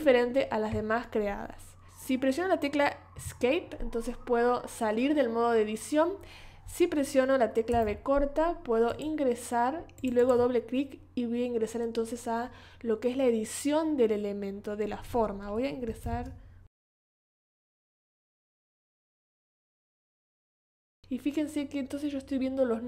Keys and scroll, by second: 3.1 Escape, 7.7 v, 16.0 super+=, 17.5 space.